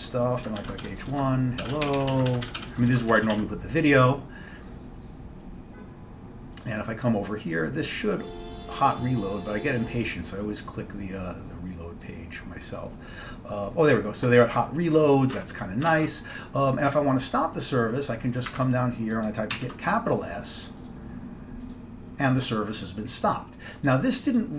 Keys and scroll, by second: 0.7-3.0 typing, 3.3 ctrl+x, 3.4 ctrl+s, 15.4 alt+Tab, 16.0 alt+Tab, 16.2 alt+Tab, 19.6 shift+s.